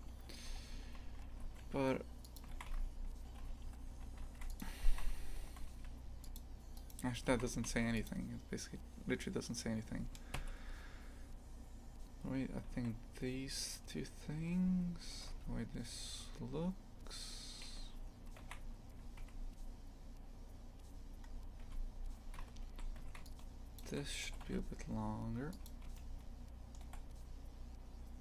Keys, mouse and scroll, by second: 2.5 shift+f, 4.9 shift+f, 6.8 right click, 7.3 shift+f, 10.3 KP_3, 12.0-15.2 scroll up 1, 15.2 g, 18.4 shift+f, 21.2 scroll up 1, 21.6 Tab, 22.4 z, 23.7 shift+click, 24.3 g, 26.0-28.2 shift+middle drag.